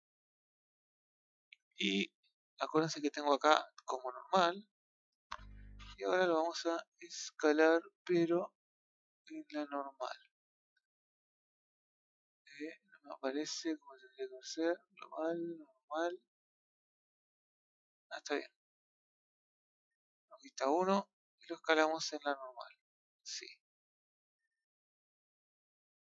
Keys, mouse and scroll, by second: 4.3-5.9 drag, 7.0-10.0 scroll up 4, 10.0-12.2 middle drag, 13.6-15.7 drag, 15.7 scroll down 1, 15.9-17.1 middle drag, 17.1 click, 20.0 KP_1, 21.7 click.